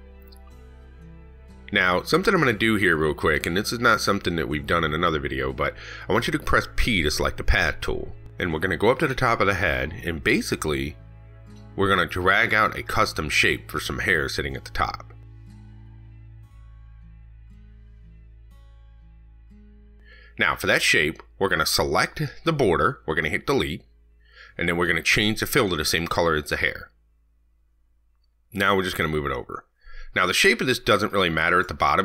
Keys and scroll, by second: 3.4 ctrl+z.